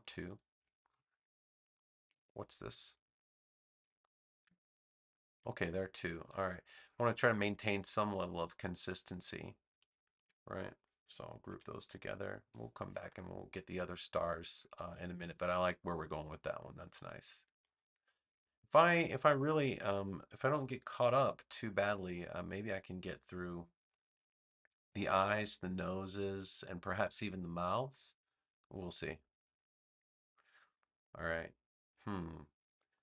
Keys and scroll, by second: 0.6 space, 6.7 space, 11.4 super+g, 12.6 space, 17.4 space.